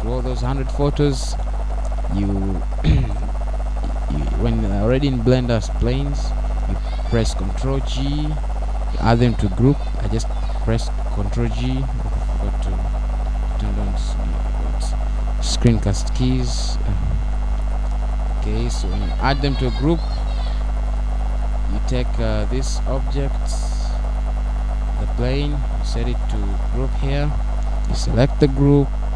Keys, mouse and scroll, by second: 26.1 n, 27.5 scroll up 1.